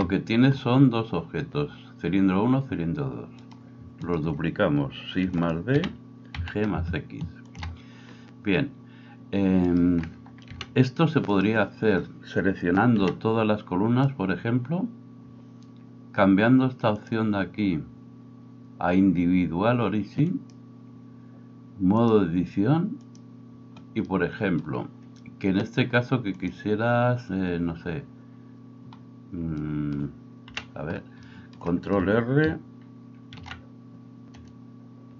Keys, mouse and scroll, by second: 3.4 right click, 3.8 shift+middle click, 4.0 shift+click, 4.2-9.6 shift+middle drag, 5.2 shift+d, 5.8 g, 9.6 right click, 9.8-11.3 middle drag, 10.5 h, 11.3 right click, 11.5-17.0 middle drag, 13.0 b, 17.0-35.1 drag, 30.5 KP_1, 33.4 ctrl+g.